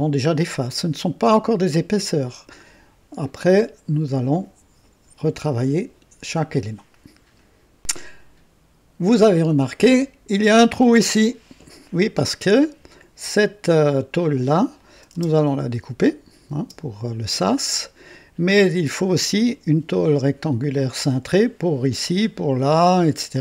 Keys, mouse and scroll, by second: 13.2 click, 14.1 click, 14.8 click, 15.1 space, 16.5 space.